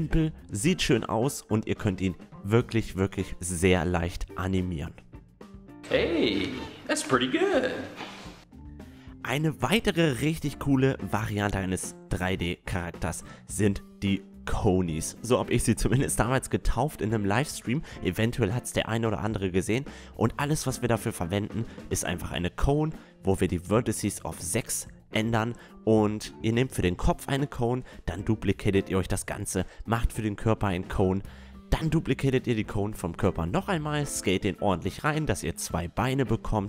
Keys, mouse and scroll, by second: 0.0 click, 0.4-1.7 drag, 2.0 click, 2.3 click, 3.0 Tab, 3.1 click, 3.2 a, 3.5 a, 3.7 a, 3.8 Tab, 4.4 a, 9.0-18.9 drag, 18.9 s, 20.4 KP_1, 21.6-23.3 middle drag, 26.4 shift+d, 26.9 r, 27.6 r, 29.3-32.5 typing, 30.4 drag, 30.7 drag, 31.0-31.7 drag, 31.9 click, 33.5 s, 34.0 click, 34.3 s, 35.8-36.6 drag.